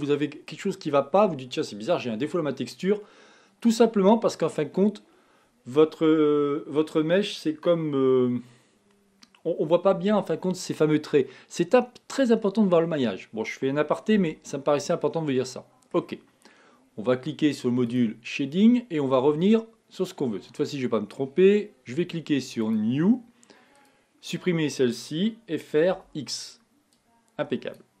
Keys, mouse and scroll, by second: 14.4 Tab, 15.1-18.2 middle drag, 18.2-25.3 drag, 26.0 x, 27.2 click.